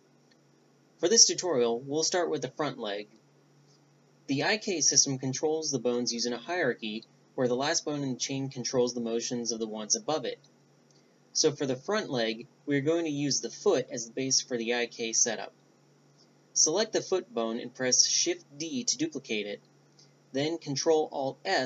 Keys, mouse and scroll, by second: 4.9-7.0 middle drag, 7.0 Tab, 7.3-11.6 right drag, 11.6-12.6 middle drag, 13.4-14.9 right drag, 15.0 shift+d, 18.7 ctrl+alt+s.